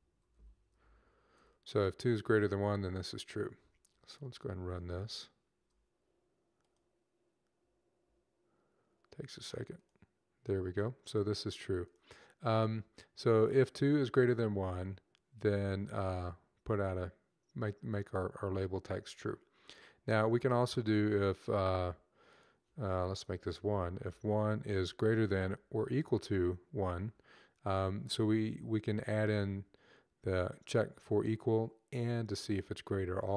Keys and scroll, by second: 0.0-1.6 typing, 6.6-7.4 typing, 23.5 1, 23.8 Right, 24.0 Right, 25.3 =.